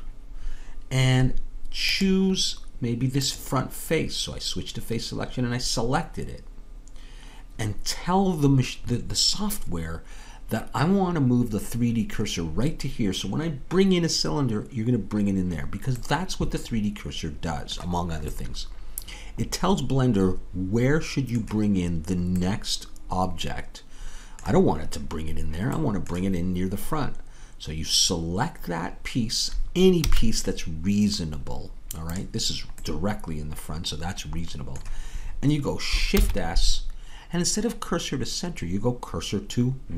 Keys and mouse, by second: 2.1-8.4 drag, 16.1-21.1 middle drag, 26.2-29.8 middle drag, 30.0 a, 33.6-35.1 drag, 36.1 shift+s.